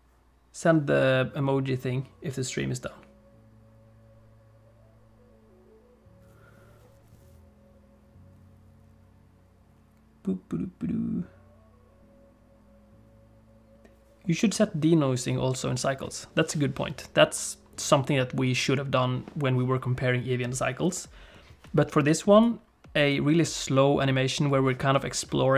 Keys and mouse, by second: 22.5-25.5 drag.